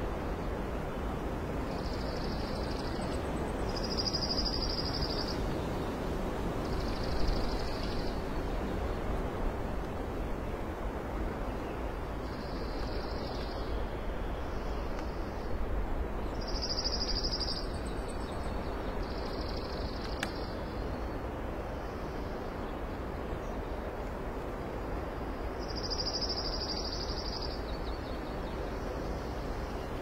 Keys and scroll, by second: 0.7 alt+space, 1.7 space, 5.8 ctrl+z, 7.8 ctrl+z, 10.6 alt+space, 11.3 typing, 12.6 alt+space, 12.8-13.2 typing, 14.6 ctrl+shift+g, 16.9 alt+space, 19.7 ctrl+z, 20.6 ctrl+z, 20.7 ctrl+z, 23.7 alt+space.